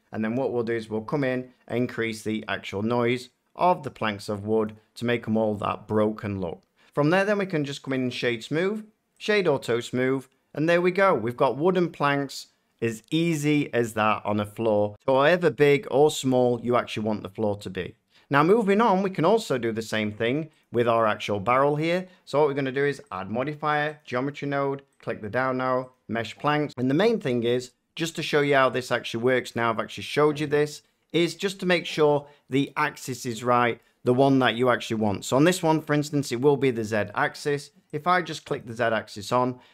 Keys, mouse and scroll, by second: 1.6 click, 4.6 click, 7.9 click, 9.2 click, 10.4-11.3 drag, 11.4-14.3 middle drag, 19.3 scroll, 19.8 shift+middle click, 20.5 click, 23.1 click, 23.9 click, 24.9 click, 25.8 click, 37.9 click, 38.5 click.